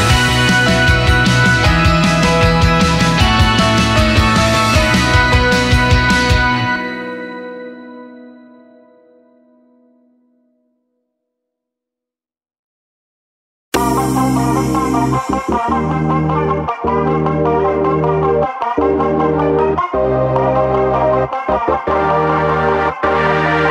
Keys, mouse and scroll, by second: 0.4-1.1 drag, 1.2-1.6 drag, 2.2 click, 2.7-3.0 scroll down 2, 3.3 click, 4.2-4.5 scroll down 1, 5.2 click, 6.0 g, 7.7 shift+d, 9.4 shift+d, 11.2 shift+d, 13.7 shift+d, 15.8 shift+d, 17.7 click, 18.7 click, 22.7 click, 23.6-23.7 scroll up 3.